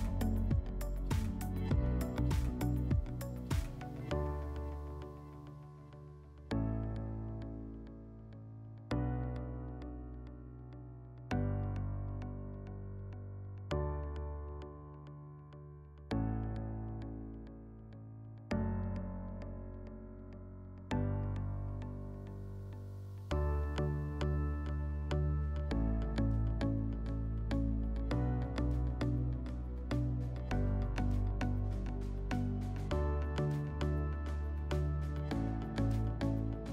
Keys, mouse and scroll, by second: 1.3 alt+middle click, 2.2 middle click, 3.9 click, 4.9 click, 6.0 Delete, 7.5 click, 8.1 click, 9.6 alt+middle click, 10.5 click, 11.1 click, 12.4 Delete, 13.9 click, 16.1 alt+scroll, 17.8 alt+scroll, 18.8 click, 21.4 click, 24.6-26.6 drag, 26.7 click, 28.9 click.